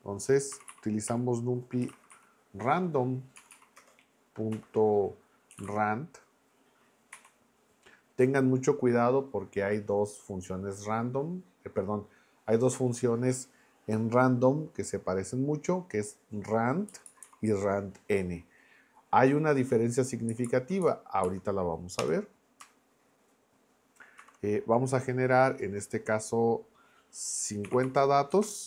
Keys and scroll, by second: 0.3-2.6 typing, 3.4 Down, 3.8 Return, 4.5-7.1 typing, 16.9 Down, 20.3 Up, 21.2 Down, 22.0 Return, 24.2 shift+9, 27.7 6, 28.3 BackSpace.